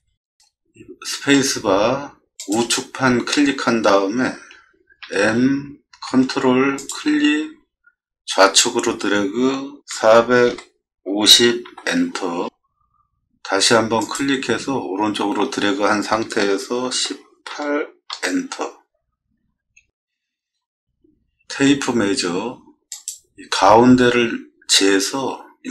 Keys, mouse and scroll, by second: 1.4 space, 2.4 click, 5.1 m, 6.8 click, 9.9 4, 10.5 5, 11.1 0, 11.6 Return, 14.0 click, 16.9 1, 18.1 Return, 21.6 t, 23.0 click.